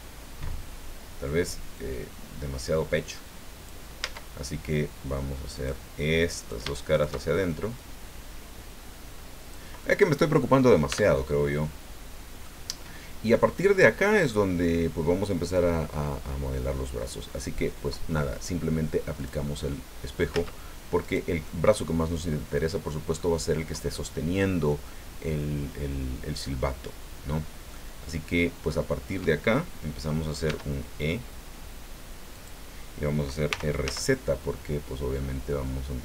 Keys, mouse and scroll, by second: 1.7-3.9 drag, 4.0 Tab, 5.5 click, 6.4 shift+right click, 7.8-9.7 drag, 9.8 click, 10.9 Tab, 11.3-12.6 drag, 12.9 scroll down 2, 13.4-14.4 drag, 19.2 click, 19.7 click, 20.3 Tab, 21.0 right click, 21.4-22.7 drag, 23.2 click, 27.7-29.3 drag, 30.4 e, 32.3 click, 33.5 r, 33.8 z.